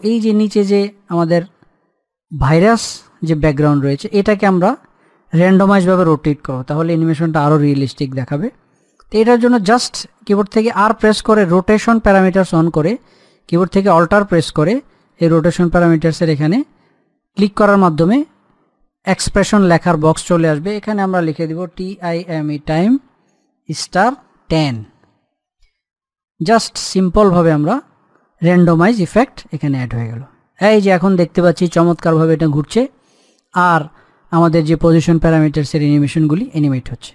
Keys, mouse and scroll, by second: 0.5 click, 1.1-1.5 scroll down 1, 3.4 click, 4.0-5.4 scroll down 1, 5.4-9.0 drag, 11.5 r, 12.1 scroll down 1, 15.8 alt+click, 22.3-23.7 typing, 27.8 middle click, 28.5 click.